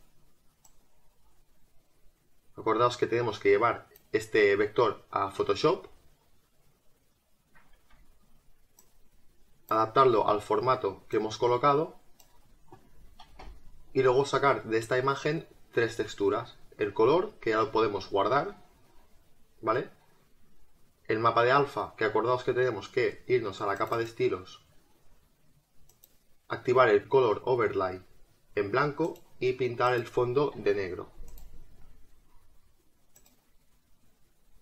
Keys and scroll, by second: 2.3 space, 13.3 Return.